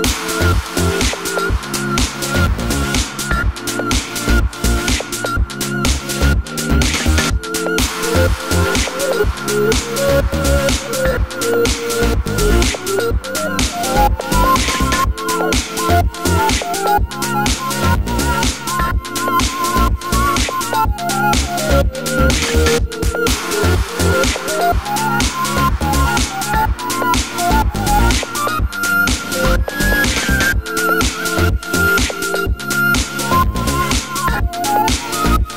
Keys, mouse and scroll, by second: 1.0 scroll up 2, 1.1-6.2 middle drag, 1.6 scroll down 2, 4.8 ctrl+r, 6.2 right click, 7.7 click, 7.9 shift+click, 8.2 shift+click, 8.4 shift+click, 8.6-10.2 middle drag, 9.1 g, 10.2 click, 10.3-15.0 middle drag, 11.0 scroll down 1, 11.2 Tab, 11.8 KP_3, 12.4 scroll up 1, 12.7 scroll down 1, 13.0 shift+d, 15.0 click, 15.1 Tab, 18.7-20.3 middle drag, 20.3-23.7 drag, 22.2 g, 23.8 middle click, 24.2 scroll down 1, 26.5 Tab, 32.0 KP_3, 35.3 scroll up 1.